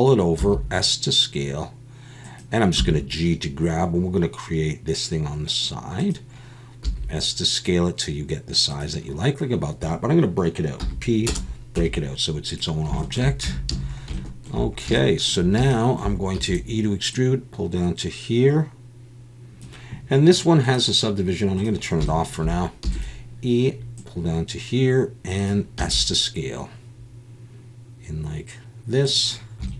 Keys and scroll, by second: 0.4 s, 2.7 g, 6.8 s, 10.8 p, 11.8 Tab, 13.4 Tab, 13.7 a, 16.3 e, 22.8 e, 25.8 s.